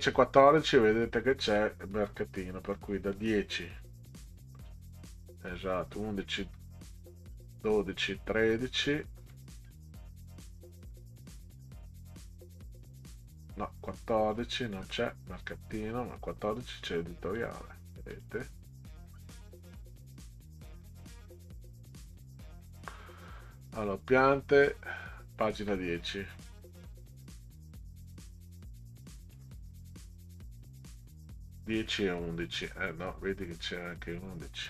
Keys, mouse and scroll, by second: 2.0 scroll down 4, 3.1 click, 4.6 scroll up 2, 5.8-7.4 scroll down 10, 8.4-11.7 scroll down 22, 13.0 click, 14.8 scroll up 2, 17.4 click, 18.1 click, 19.1 scroll down 2, 19.7 scroll down 2, 25.9 scroll down 2, 26.8 click, 29.7 scroll down 2, 31.5-32.1 scroll down 8.